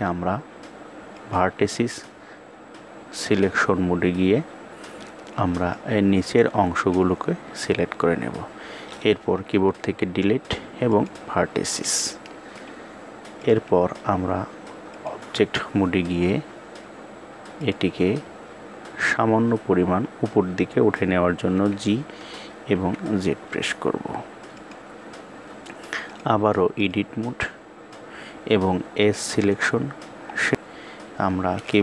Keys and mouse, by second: 0.6 click, 5.3-6.5 drag, 9.3 Delete, 12.9-14.6 drag, 17.1 click, 25.6 click, 28.5 click.